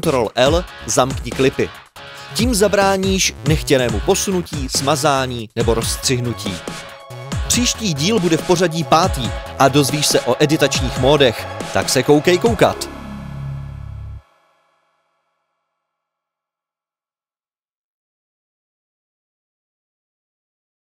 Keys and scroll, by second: 2.3 super+2, 4.5 Delete, 5.1 F4, 5.5 F1, 5.7-6.7 typing, 6.8 Delete, 7.7 Delete, 8.4 Delete, 10.7 F4, 12.1-13.4 typing.